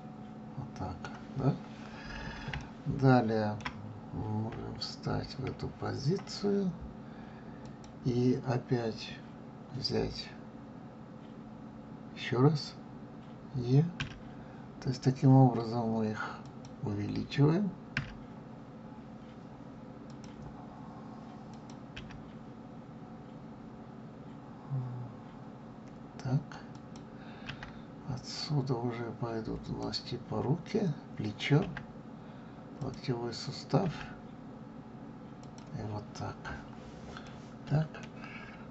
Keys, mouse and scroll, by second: 4.5 KP_3, 7.6 click, 14.0 e, 17.9 e, 21.5 click, 21.9 e, 27.4 e, 31.6 e, 33.9 e, 37.2-38.7 middle drag.